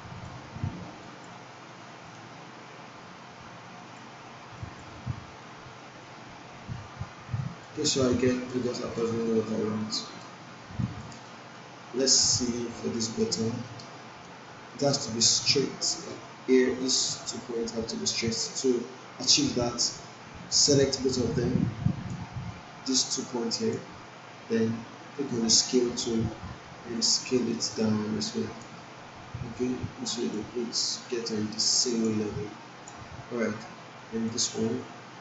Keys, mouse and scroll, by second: 8.0-8.6 alt+middle click, 9.0-9.6 alt+right click, 9.8 alt+middle click, 10.2-10.8 alt+right click, 11.2 alt+middle click, 12.2 alt+right click, 13.4 alt+middle click, 13.8-14.4 alt+right click, 14.9 alt+middle click, 16.0 click, 16.2-17.3 drag, 20.8-22.4 drag.